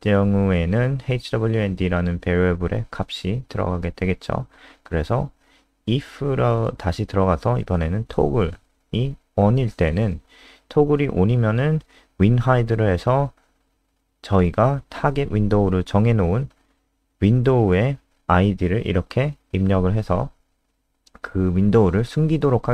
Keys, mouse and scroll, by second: 3.4-6.8 typing, 7.9-9.0 typing, 9.0 Return, 10.2-16.7 typing, 17.6 click, 20.0 Up, 20.1 End, 20.4 Return, 20.7-22.7 typing.